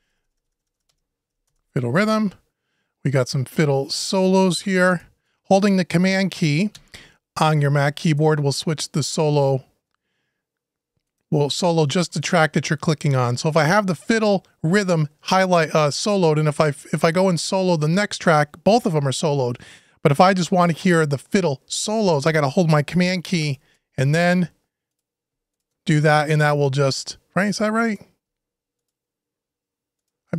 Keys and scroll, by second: 1.2 Return.